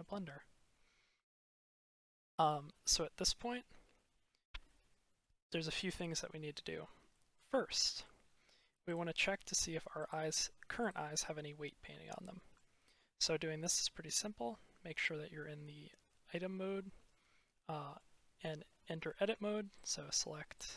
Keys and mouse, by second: 1.1-1.4 shift+drag, 1.7 click, 4.5 middle click, 7.0 click, 7.5 shift+click, 8.9-10.0 drag, 11.9 shift+middle drag, 12.1-12.4 shift+drag, 17.4 click, 19.6 click, 20.4 click.